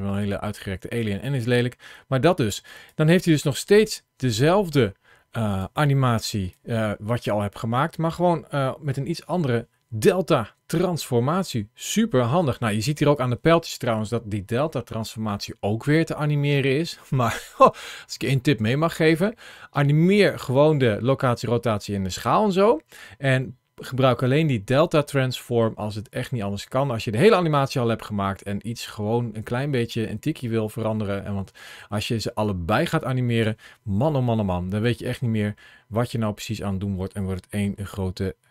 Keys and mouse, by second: 0.1 ctrl+z, 2.8-5.5 drag, 6.2 ctrl+shift+a, 34.8 middle click, 36.1-37.5 middle drag.